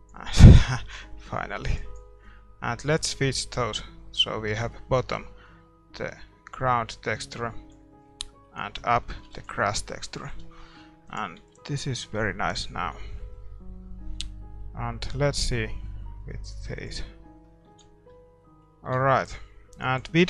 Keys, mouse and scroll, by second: 6.0-7.9 drag, 8.0-12.1 middle drag, 9.3 ctrl+s, 11.1-12.8 drag, 12.1 ctrl+s, 12.4-17.4 middle drag, 16.8-18.5 drag, 17.7 ctrl+s, 18.4-20.2 middle drag, 19.7-20.2 drag.